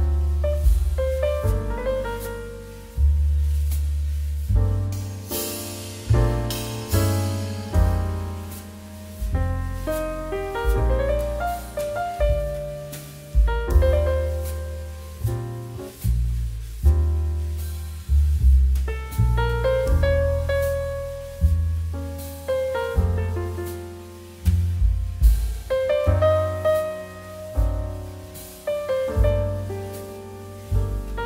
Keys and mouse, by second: 1.2 click, 12.6 click, 17.6 click, 21.9 click, 28.5 click.